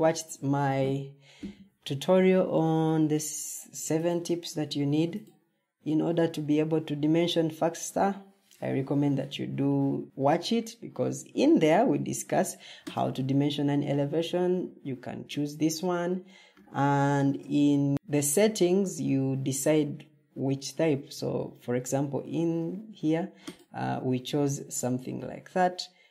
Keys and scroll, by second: 17.1 ctrl+t.